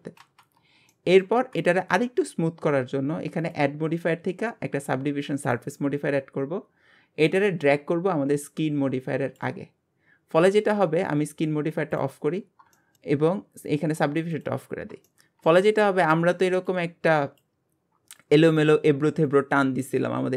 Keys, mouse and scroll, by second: 0.1-0.7 scroll down 5, 0.9 middle click, 1.3 alt+z, 2.0 Tab, 2.3 scroll up 2, 5.5-6.4 drag, 7.3-9.4 drag, 11.9 click, 12.7-14.3 shift+middle drag, 14.3 click, 15.1-20.3 shift+middle drag.